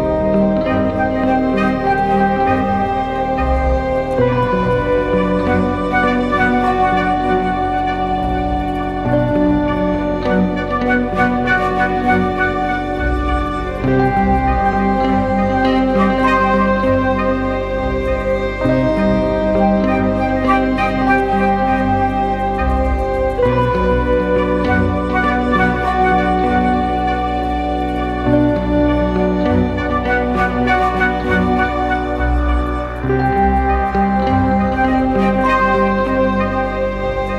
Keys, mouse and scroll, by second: 5.8-8.0 scroll up 1, 8.2 ctrl+=, 8.3 ctrl+=, 8.5 ctrl+=, 8.7 ctrl+=, 9.3 space, 10.5 ctrl+t, 11.6 alt+shift+click, 15.3 alt+shift+click, 19.0 alt+shift+click, 24.6 alt+shift+click, 29.7 Return, 30.7 ctrl+-, 31.0 ctrl+-, 34.8-37.3 scroll up 1.